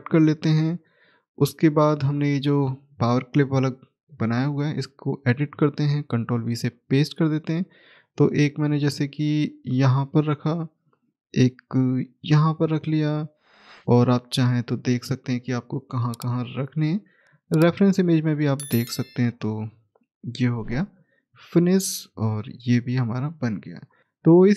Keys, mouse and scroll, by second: 1.5-2.3 scroll down 1, 2.7 scroll up 1, 2.8 click, 6.6 middle click, 8.7 click, 12.1 right click, 12.6 middle click, 13.6 click, 15.9 right click, 17.2 click, 19.3 right click, 20.7 click, 22.9 middle click, 23.8 scroll down 1, 24.0 middle click.